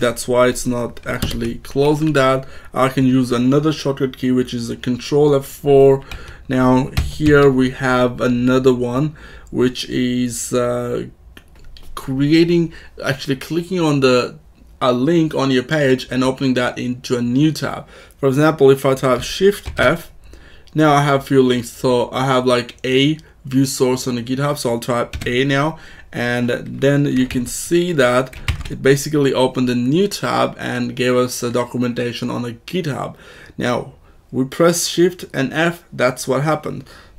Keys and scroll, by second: 1.1 ctrl+F4, 6.0 Down, 6.9 k, 7.2 j, 19.5 shift+f, 25.1 a, 27.2 alt+Right, 28.4 ctrl+Tab.